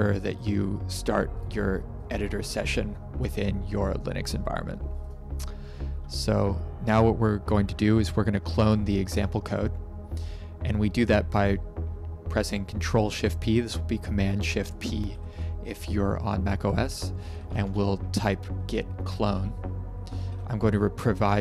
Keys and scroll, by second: 8.6 ctrl+shift+p, 14.7-15.7 typing, 16.9-18.2 typing, 19.3 Return, 20.2 ctrl+v.